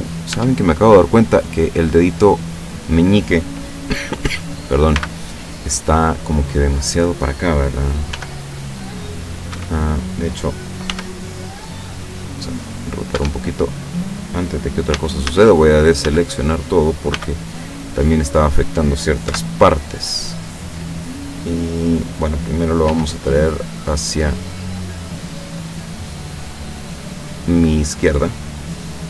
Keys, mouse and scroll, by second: 0.0 right click, 0.4 Tab, 1.4 middle click, 1.8 scroll up 1, 2.9 middle click, 5.0 b, 5.5 click, 8.2 g, 9.6 Escape, 10.9 r, 13.2 Escape, 13.6 scroll down 1, 14.9 a, 15.7-16.1 scroll up 1, 16.1 a, 17.1 b, 17.5 click, 19.3 KP_7, 22.9 g, 26.3 click.